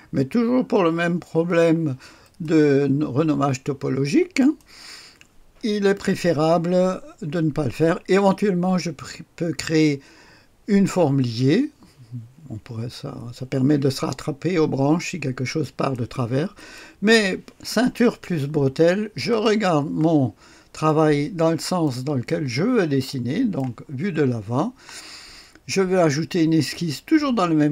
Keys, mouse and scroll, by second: 2.1 click, 4.3 click, 13.8-15.9 drag, 16.5 click, 19.3 click, 20.2-20.8 scroll down 1, 20.8-22.1 right drag, 22.4-23.5 scroll up 1, 23.0-24.2 right drag.